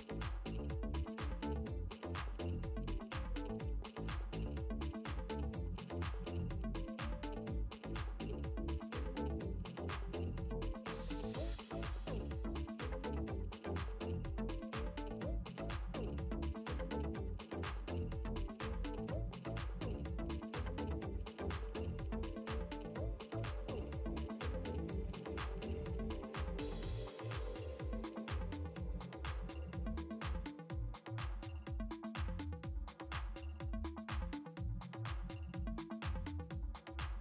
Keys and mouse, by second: 0.0 click, 2.3 click, 5.6 space, 5.7 click, 7.2 click, 9.1 click, 11.9 click, 15.4 click, 16.6 space, 16.8 click, 21.6 space, 21.8 click, 22.8 click, 24.2 click, 26.4 c, 27.2 space, 29.5 f, 32.5 click, 34.8 click, 36.0 click.